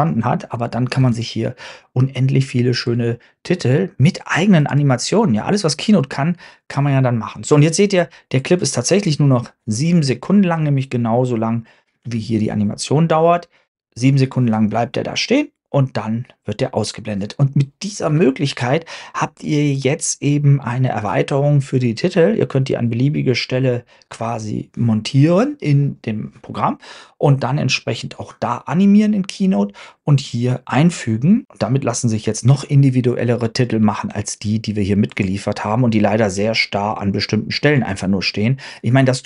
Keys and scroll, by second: 1.0 super+Tab, 1.4 super+Tab.